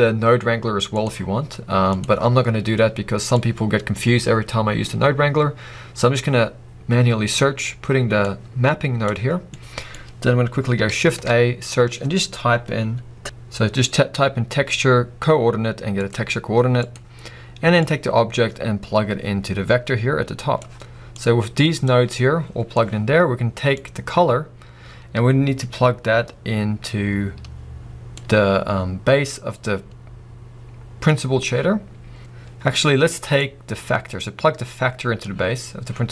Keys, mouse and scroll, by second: 6.3 click, 33.4 click.